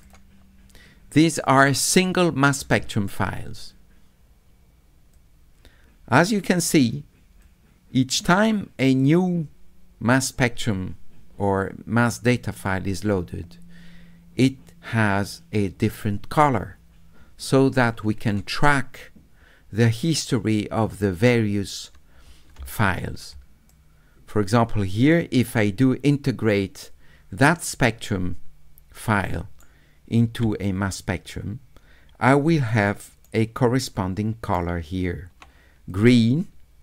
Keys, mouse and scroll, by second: 0.0 click, 5.1-6.2 drag, 7.4-18.3 drag, 22.7 middle click, 23.3 s, 23.7-29.6 middle drag, 31.0 click, 32.7 shift+middle click, 33.8 shift+right click, 35.9 click.